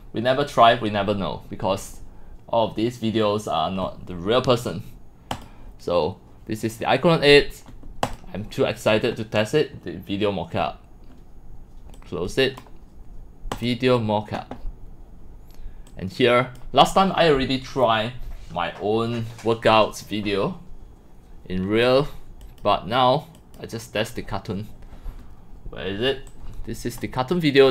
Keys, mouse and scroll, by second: 12.0 click, 13.5 click, 15.1 scroll up 1, 15.9 click, 19.9-21.8 drag, 22.4 click, 23.4 click, 24.3-25.5 drag, 26.3-27.0 drag.